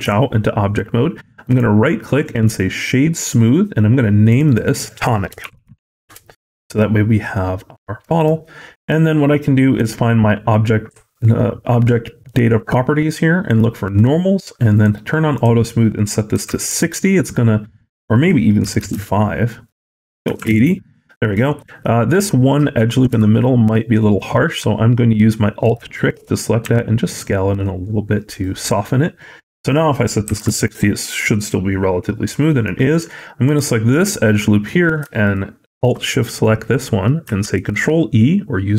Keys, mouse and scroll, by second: 1.3 right click, 4.1 click, 4.3 click, 7.2-7.9 scroll down 5, 7.9 middle click, 8.2-8.9 scroll up 5, 9.6 click, 13.3 click, 14.7 click, 15.2 click, 17.8 click, 19.5 click, 21.3 shift+middle click, 21.5-23.0 scroll up 2, 23.0 Tab, 25.5 alt+click, 26.5 s, 29.5 click, 32.1 middle click, 33.3 alt+click, 34.2 middle click, 35.1 alt+shift+click, 36.3 middle click, 37.3 ctrl+e.